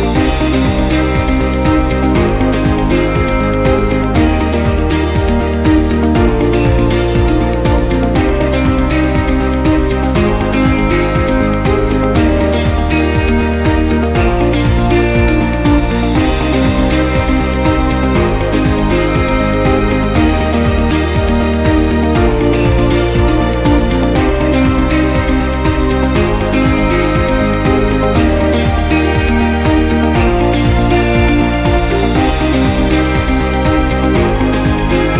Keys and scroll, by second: 2.6 m, 8.4 s, 26.7 m, 33.0 m.